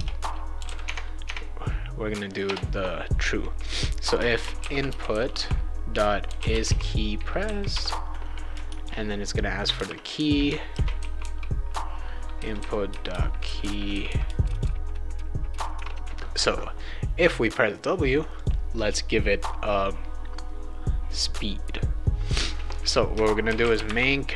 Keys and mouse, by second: 0.0-1.1 typing, 1.2 Tab, 2.4 BackSpace, 4.1-7.2 typing, 7.7 Return, 8.7 shift+9, 9.7-11.7 typing, 15.8 Return, 16.0 ctrl+s, 18.3 click, 23.2-24.3 typing.